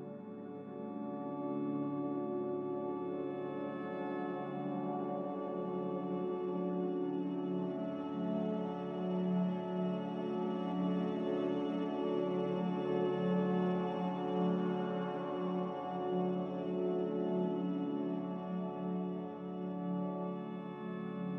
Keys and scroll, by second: 2.8-6.4 typing, 9.1 m, 14.1-15.4 typing, 18.8 a.